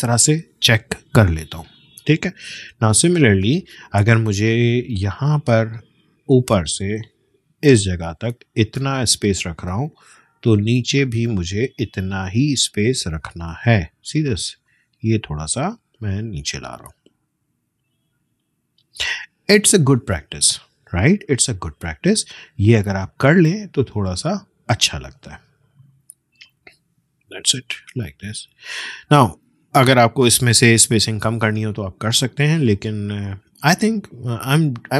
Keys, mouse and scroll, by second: 1.2 BackSpace, 1.7 click, 1.9 BackSpace, 2.7 space, 2.9 click, 3.2 space, 4.3 click, 7.0-13.9 drag, 13.9-14.3 alt+scroll up 1, 14.5 space, 14.6 click, 15.0 space, 15.6-19.1 drag, 19.1-19.9 alt+scroll down 1, 19.9 scroll down 1, 20.1 space, 20.4 click, 20.6 space, 22.1 click, 22.9-25.2 shift+drag, 25.2 ctrl+z, 25.7 click, 27.4 BackSpace, 28.2 click, 28.3 BackSpace, 28.9 click, 31.1 space, 31.4 click, 31.6 space.